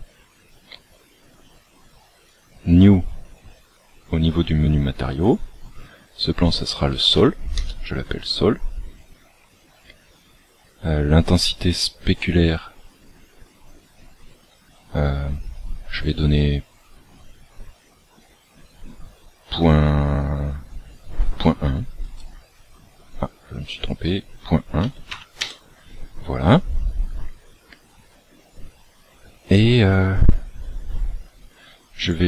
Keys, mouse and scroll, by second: 2.2 click, 5.2 click, 9.0-11.6 scroll down 6, 16.0 click, 23.7 click, 31.6 scroll up 2.